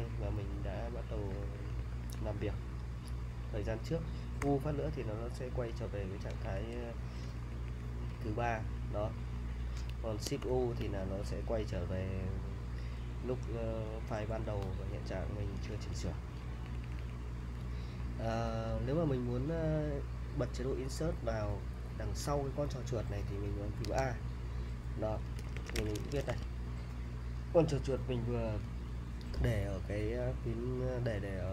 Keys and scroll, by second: 1.3-2.0 typing, 4.4 u, 6.2-10.4 typing, 15.5-18.0 typing, 23.8 typing, 25.1-26.8 typing.